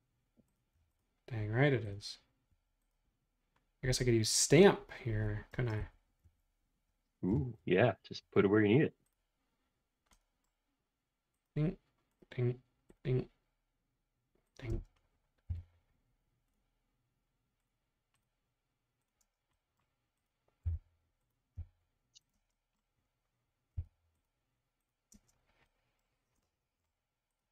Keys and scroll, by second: 5.6 space, 5.8 Escape, 7.4 m, 14.7 space, 15.5 m, 19.3 space, 20.8 m, 21.6 Up, 22.4 space, 23.7 m, 25.1 space.